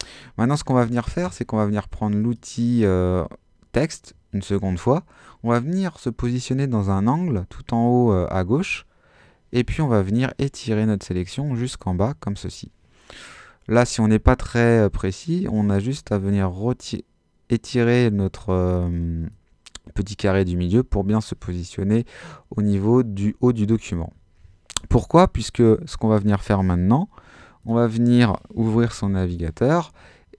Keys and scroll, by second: 28.3-29.5 typing.